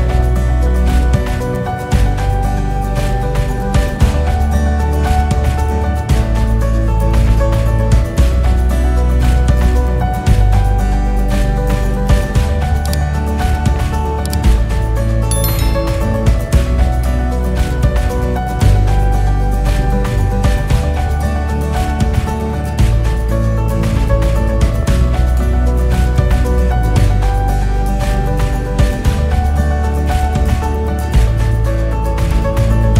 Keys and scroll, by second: 19.0 Return.